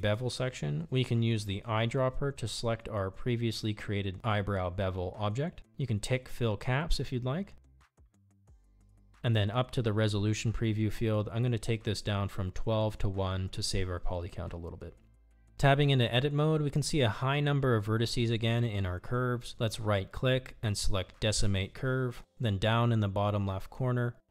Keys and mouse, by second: 2.7 click, 6.8 click, 11.2-15.5 drag, 16.0 Tab, 23.0 right click.